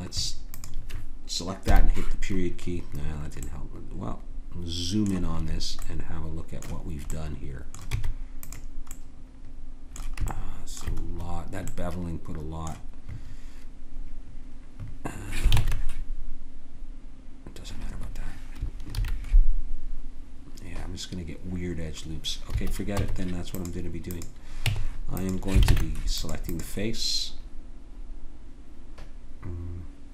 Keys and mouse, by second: 1.6 KP_Decimal, 7.9 Tab, 15.6 ctrl+Tab, 19.0 ctrl+r, 22.9 Tab, 24.6 Tab, 25.7 ctrl+Tab.